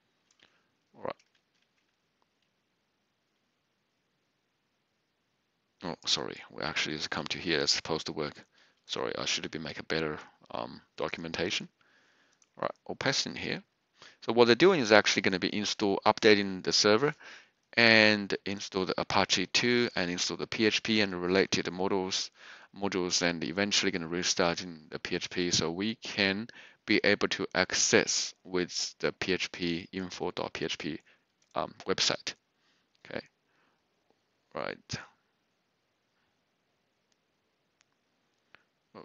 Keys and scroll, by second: 1.3 ctrl+c, 9.5 ctrl+c, 13.2 ctrl+v.